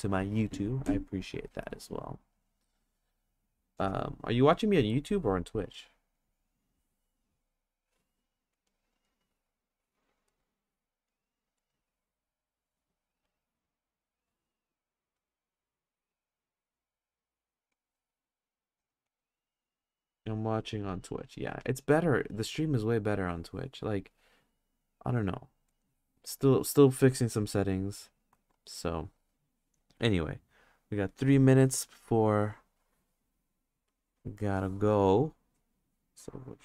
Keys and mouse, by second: 32.3 click, 33.9 click, 35.6 click, 36.1 click.